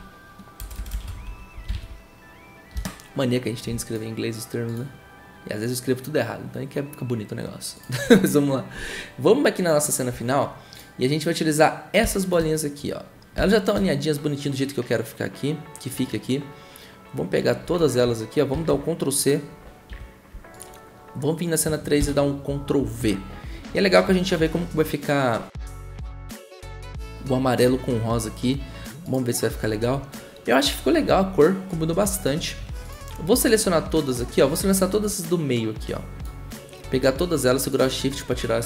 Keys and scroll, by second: 0.0-2.2 typing, 8.6 Return, 18.5 ctrl+c, 19.9 F2, 22.0 ctrl+v.